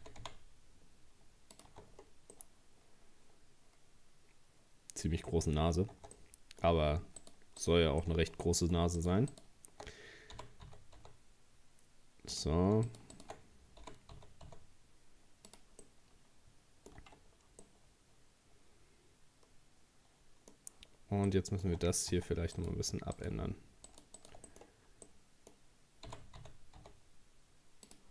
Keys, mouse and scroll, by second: 0.0 g, 1.7 Tab, 1.9 scroll down 3, 2.3-5.4 middle drag, 5.5 scroll up 3, 5.9 Tab, 6.2-7.2 middle drag, 7.2 shift+right click, 7.6 shift+right click, 8.0 shift+scroll up 1, 8.0 shift+middle click, 9.0 right click, 9.3 shift+right click, 10.4 g, 12.9 shift+right click, 13.1 shift+right click, 13.8 g, 15.8-17.0 middle drag, 17.0 Tab, 17.3 scroll down 3, 17.6-20.7 middle drag, 20.9-21.3 scroll up 4, 21.3 middle click, 22.1 Tab, 22.6 right click, 23.2 shift+right click, 23.9 shift+right click, 24.2 shift+right click, 24.5 middle click, 24.6 scroll down 2, 25.1-26.1 middle drag, 26.1 g.